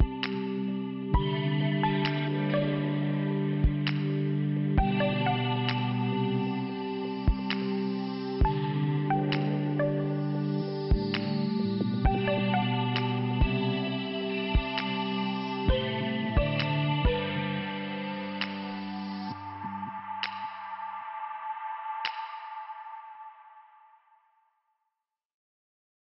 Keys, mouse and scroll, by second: 1.1 click, 3.0 click, 4.9 click, 9.8 click, 11.4 click, 11.9 click, 13.2 click, 16.2 click, 18.8 5, 19.9 i, 21.6 click.